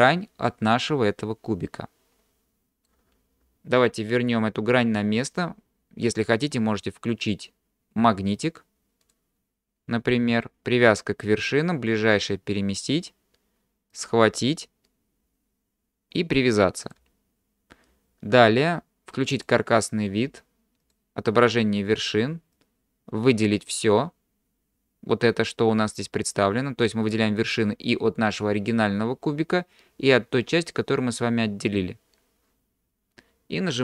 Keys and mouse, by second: 0.5-2.9 middle drag, 8.4 click, 9.1-12.6 drag, 14.0-17.0 drag, 19.4 click, 20.9 click, 22.7-23.7 drag.